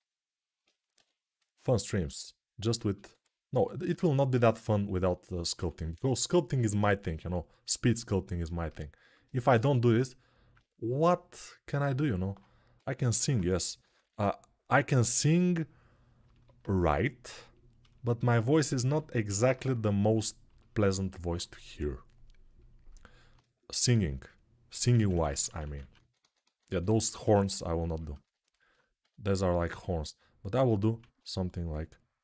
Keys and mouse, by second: 0.7 6, 2.9 1, 5.9 [, 6.4 [, 6.6 [, 12.5 g, 13.6 ], 13.8 ], 24.7 ctrl+z, 24.9-27.2 ctrl+z, 28.8 g, 30.8 ctrl+z.